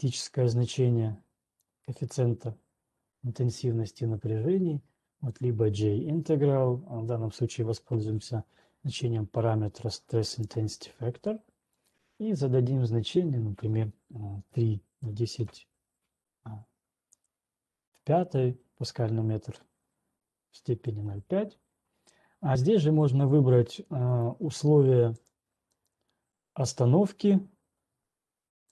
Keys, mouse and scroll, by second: 1.8 click, 5.8 click, 11.0 right click, 12.3 click, 14.8-15.8 typing, 17.3 Return, 24.3 click, 25.3 click, 25.8 click.